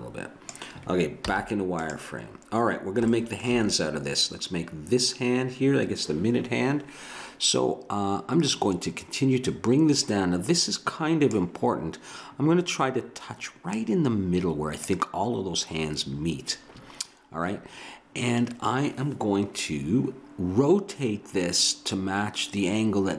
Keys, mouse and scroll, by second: 1.3 z, 9.4 click.